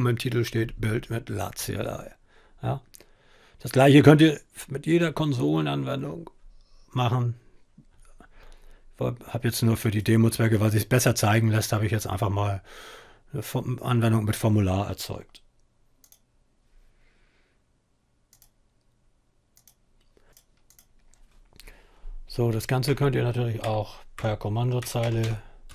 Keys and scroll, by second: 22.3-25.7 typing.